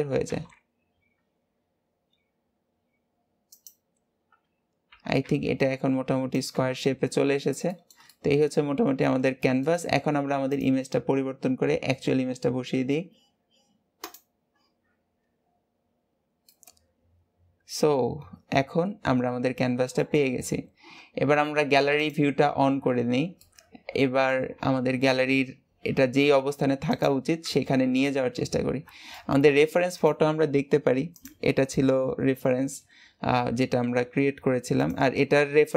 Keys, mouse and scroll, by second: 4.1-4.8 scroll up 2, 4.8 g, 6.4 Tab, 6.6-7.6 scroll down 11, 7.6-10.4 shift+middle drag, 10.4-13.5 drag, 16.4-19.4 middle drag, 20.2-22.1 scroll down 2, 22.1 click, 22.9 scroll down 3, 23.3-24.4 middle drag, 24.4 scroll up 2, 24.9 g, 27.6 KP_1, 29.1-31.3 shift+middle drag.